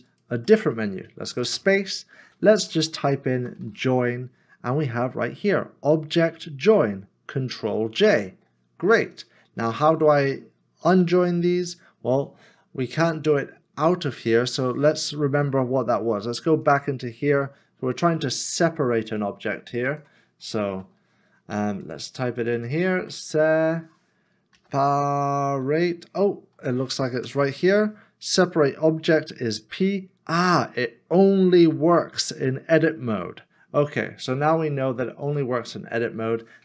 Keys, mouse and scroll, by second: 0.1 shift+click, 3.5 o, 3.6 i, 20.6 s, 22.9 s, 23.1 e, 24.5 p, 25.6 s, 27.1 BackSpace.